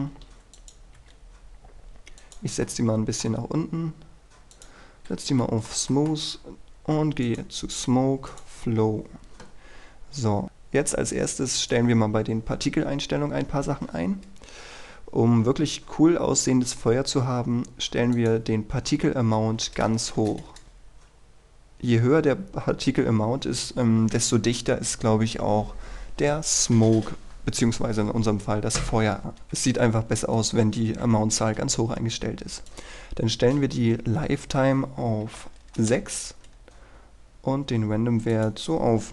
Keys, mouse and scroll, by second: 1.1 typing, 2.4 click, 2.8-4.2 middle drag, 4.7 click, 5.0-5.4 scroll up 1, 5.6-7.2 shift+middle drag, 7.4 click, 19.5 KP_1, 19.8 KP_0, 20.6 Return, 32.8 click, 35.4 KP_6, 36.0 Return, 38.5-39.1 drag.